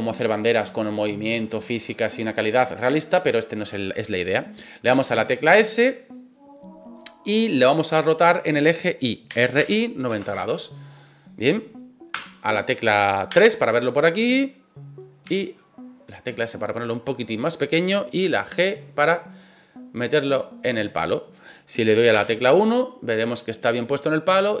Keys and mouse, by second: 4.9 s, 6.0 click, 6.9-7.5 middle drag, 9.3 r, 9.6 y, 10.1 KP_9, 10.2 KP_0, 10.4 KP_Enter, 12.1 KP_1, 13.4 KP_3, 15.2 s, 17.5 click, 18.2 g, 20.5 click, 22.1 KP_1, 23.9-24.6 middle drag.